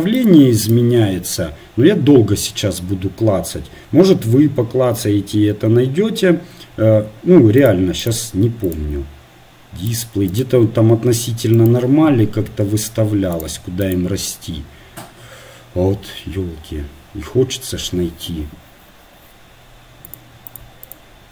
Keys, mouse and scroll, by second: 13.5-21.3 drag.